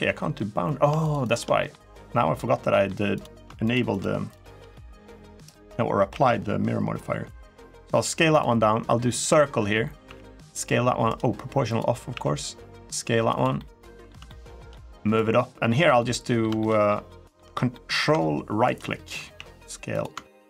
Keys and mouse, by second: 0.8 click, 1.0 click, 1.4 middle click, 2.5 middle click, 2.9 click, 3.5 shift+click, 3.7 shift+click, 4.0 shift+click, 4.5 middle click, 5.9 i, 8.1 click, 9.8 s, 10.8 right click, 11.4 click, 11.9 s, 13.0 click, 13.3 middle click, 14.0 shift+middle click, 14.9 click, 15.9 middle click, 16.4 shift+middle click, 16.8 shift+middle click, 17.5 middle click, 18.4 ctrl+click, 19.1 s, 19.7 click.